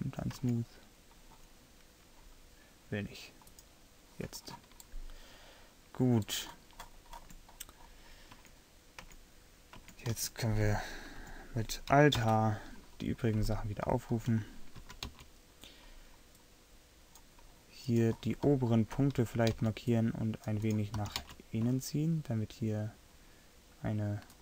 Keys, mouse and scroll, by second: 0.6 Tab, 6.9 middle click, 8.5 Tab, 9.2 Tab, 9.9 Tab, 10.2 a, 10.7 a, 11.3 a, 12.3 alt+h, 15.2 c, 18.2 middle click, 19.3 middle click, 19.6 c, 21.1 g.